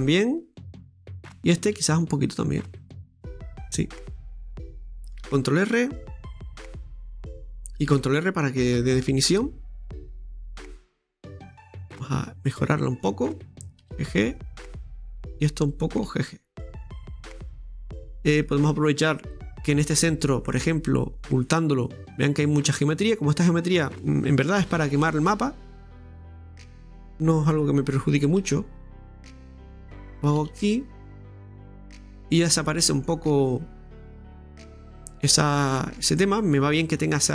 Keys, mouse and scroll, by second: 1.5 right click, 3.2-4.5 middle drag, 4.5 scroll down 2, 4.7 middle click, 5.3 ctrl+r, 7.9 ctrl+r, 10.1-10.9 scroll down 1, 10.9 Tab, 11.1 scroll down 1, 11.4-12.8 middle drag, 12.8 right click, 13.8 g, 15.7 right click, 16.1 g, 17.6 middle click, 18.4-19.4 scroll up 1, 19.4 Tab, 21.3 Tab, 21.3 click, 22.1-23.7 middle drag, 23.6 right click, 24.6 g, 26.6 right click, 28.2 right click, 28.4 g, 30.1 right click, 30.4 g, 32.2-32.7 scroll down 2, 32.7-34.2 middle drag, 34.2 click, 35.0-37.3 middle drag.